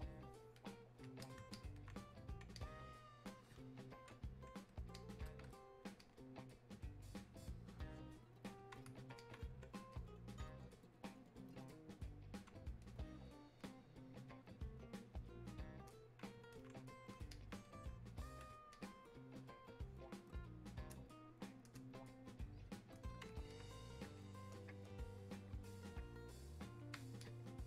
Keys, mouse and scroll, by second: 5.0-27.6 drag.